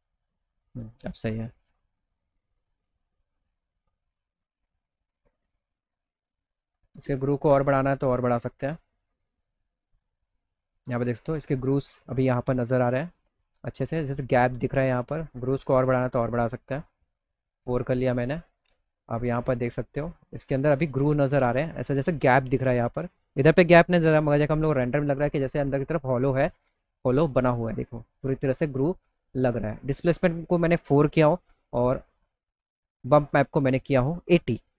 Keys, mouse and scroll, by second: 5.0 click, 6.2 click, 12.3 middle click, 17.4 middle click, 17.7 middle click, 17.8 middle click, 18.1 middle click, 19.1 click, 19.8 middle click, 21.0 middle click, 29.8 middle click, 29.8 scroll, 31.1 middle click, 31.1-31.5 scroll, 31.5 middle click, 32.7 middle click, 32.7-33.2 scroll, 33.1 middle click.